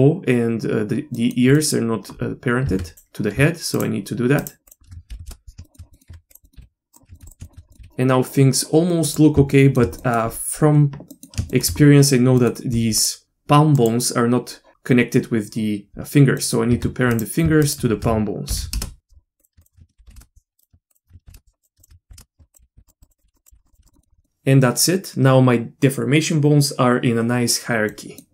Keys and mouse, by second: 1.2 middle click, 1.5 middle click, 2.6 Tab, 2.9 click, 3.7 shift+click, 4.4 shift+click, 4.7 shift+click, 5.2 ctrl+p, 5.6 shift+middle click, 5.9 middle click, 6.1 Tab, 6.4 middle click, 7.1 r, 7.4 shift+middle click, 7.8 r, 9.5 shift+middle drag, 10.0 middle click, 11.1 middle click, 11.5 shift+middle click, 12.4 middle click, 13.0 click, 13.2 r, 16.4 middle click, 16.8 Tab, 17.1 click, 17.6 shift+click, 18.5 ctrl+p, 19.4 click, 19.6 shift+click, 20.2 ctrl+p, 20.6 click, 21.2 ctrl+p, 21.8 shift+click, 22.2 ctrl+p, 22.4 Tab, 22.7 r, 23.1 click, 23.4 click, 23.4 r, 23.5 r, 23.9 middle click, 23.9 r, 27.9 middle click.